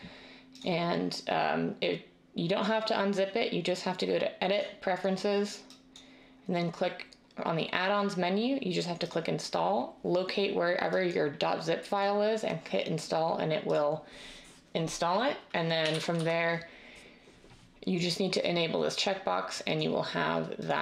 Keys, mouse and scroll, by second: 15.8-16.1 typing.